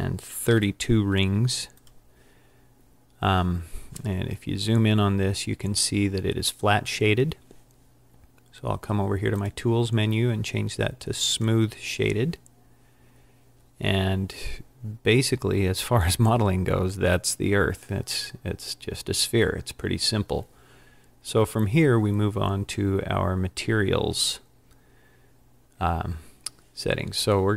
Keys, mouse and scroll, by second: 15.8-16.1 scroll down 3, 16.1-19.2 scroll up 3.